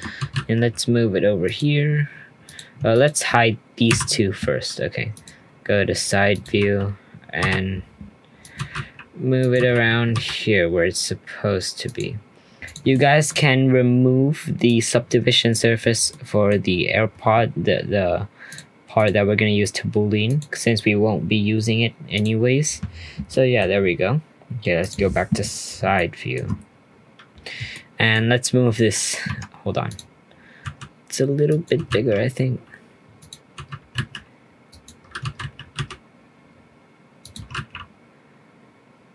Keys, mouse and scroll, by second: 0.2 g, 2.4 click, 2.9 shift+click, 3.9 h, 5.1 click, 5.6-6.3 scroll up 1, 6.3 click, 7.4 g, 8.5 g, 9.5 g, 12.2-12.6 scroll up 2, 12.6 click, 12.9-14.6 middle drag, 14.6 click, 16.1-16.7 middle drag, 16.7-17.2 scroll down 1, 17.2-18.5 scroll up 1, 18.5 click, 18.9-23.3 drag, 23.3-24.8 middle drag, 24.8 click, 25.1 scroll up 1, 26.1-28.7 shift+middle drag, 28.7 Tab, 29.1 scroll down 1, 29.2 Tab, 29.8 click, 30.2-30.6 scroll down 2, 30.6 s, 31.7 g, 33.5 g, 35.2 g.